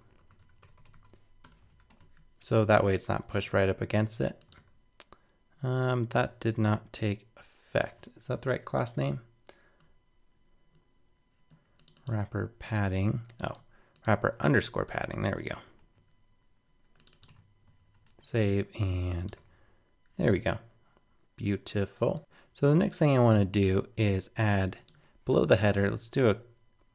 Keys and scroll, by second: 1.7 super+s, 1.9 super+Tab, 3.5 super+r, 7.9 super+Tab, 12.2 super+c, 14.9 super+v, 15.8 super+z, 17.3 super+v, 17.8 super+s, 18.0 super+Tab, 19.3 super+r, 23.3 super+Tab.